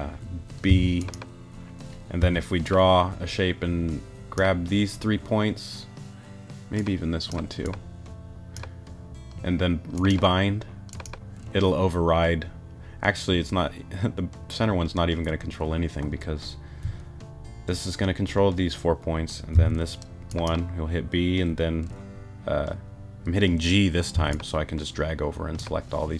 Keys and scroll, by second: 0.7 b, 2.2 g, 19.5 b, 24.1 g.